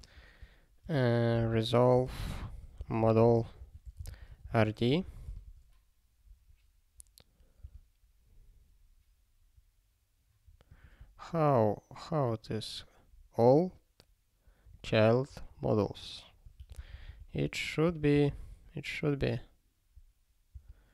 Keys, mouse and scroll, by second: 5.4 ctrl+e, 7.4 click, 18.3 ctrl+e, 20.0 click, 20.2 click.